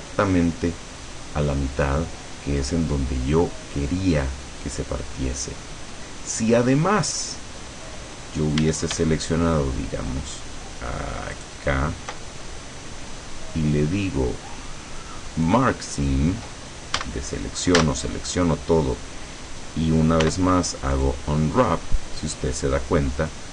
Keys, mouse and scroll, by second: 5.3-6.8 middle drag, 6.9-7.3 scroll up 2, 7.4 scroll down 2, 8.7 a, 11.4 alt+shift+right click, 15.5 click, 17.1 a, 17.9 a, 20.3 u, 21.1 click.